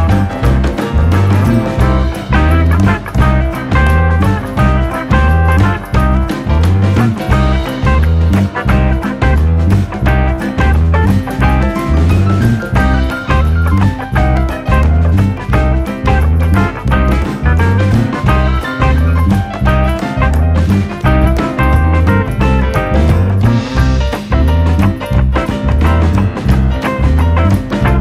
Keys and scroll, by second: 4.3 -, 4.4 2, 8.5 -, 8.8 1, 8.9 ., 9.0 5.